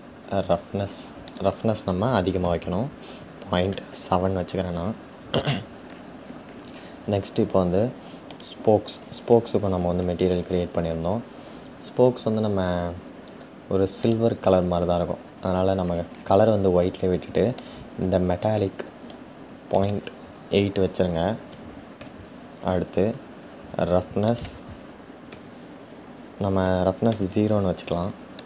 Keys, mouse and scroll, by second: 4.0 click, 17.7-26.9 drag.